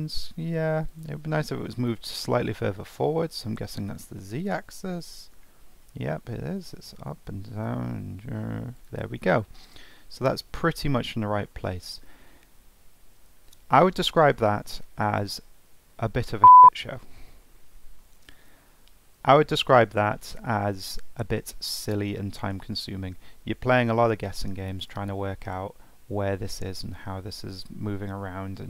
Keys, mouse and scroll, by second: 1.8-3.0 scroll up 2, 3.0 middle click, 9.2-12.3 middle drag, 12.4-13.3 scroll down 1, 13.3 Tab, 13.7-16.8 middle drag, 23.2-26.3 middle drag.